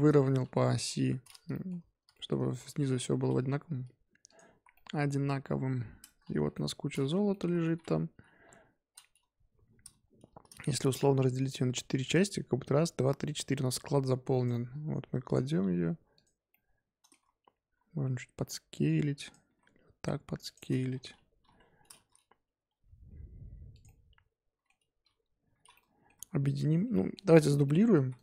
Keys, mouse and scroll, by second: 0.2-0.7 scroll down 3, 0.7 KP_7, 1.5 shift+middle drag, 1.7 z, 2.1-2.9 shift+middle drag, 2.9 g, 4.5 z, 4.7-5.8 middle drag, 5.8 scroll down 2, 6.0 KP_0, 6.3 KP_5, 6.5-7.1 middle drag, 7.1 scroll up 3, 7.3 shift+middle drag, 7.4-7.8 scroll down 1, 7.9-8.4 scroll up 2, 8.4 KP_7, 10.3 g, 10.9 s, 12.2 g, 14.5-15.6 middle drag, 15.6 g, 16.5-17.6 middle drag, 17.6 s, 19.4 s, 20.6-21.0 middle drag, 21.0 scroll down 1, 21.5 KP_7, 21.8-22.4 scroll up 1, 22.4 g, 23.8-25.5 middle drag, 25.5 scroll down 1, 25.7 middle click, 26.4-26.9 scroll up 2, 26.9-27.4 middle drag, 27.4 scroll down 4, 27.6-27.9 middle drag, 27.9 shift+d.